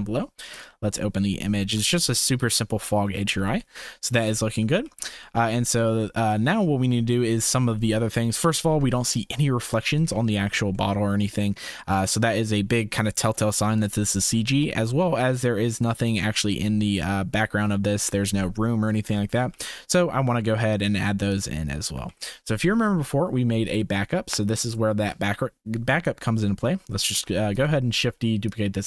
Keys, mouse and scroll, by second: 1.4 shift+click, 3.6 shift+click, 5.3 ctrl+s, 7.2 shift+click, 10.7-11.5 shift+middle drag, 11.9 click, 14.6-15.0 shift+middle drag, 20.2 ctrl+s, 22.5 ctrl+s, 27.1 shift+d, 28.5 click.